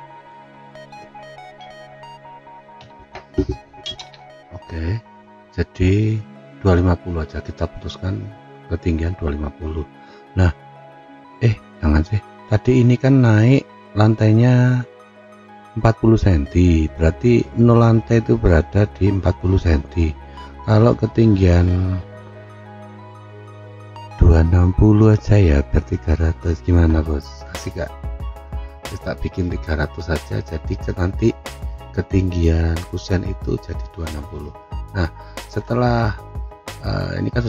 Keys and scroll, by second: 2.8 F9.